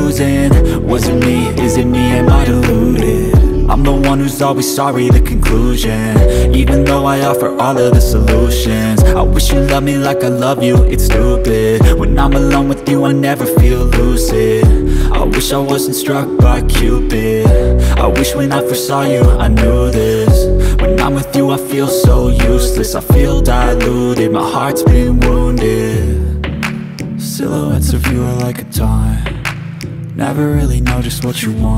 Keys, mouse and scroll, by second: 8.1 click, 10.1-12.1 drag, 13.4-15.1 drag, 18.2 ctrl+Tab, 19.7 click, 21.9 ctrl+z, 23.3 ctrl+Tab, 25.3 click, 26.6-28.3 drag.